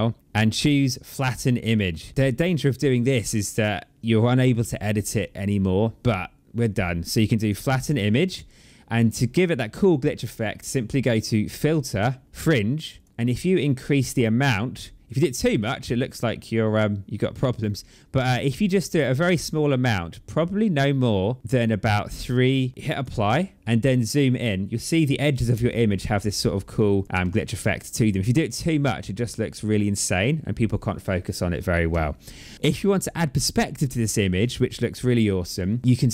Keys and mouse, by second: 7.3 click, 10.9 click, 12.8 click, 13.9 click, 22.8 click, 25.4 space, 25.5 click, 26.1 click.